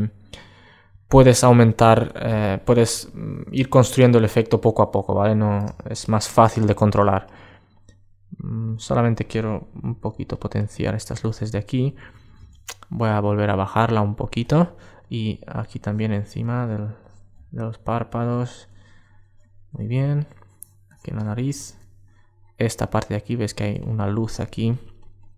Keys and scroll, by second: 4.4 alt+space, 21.1 alt+space.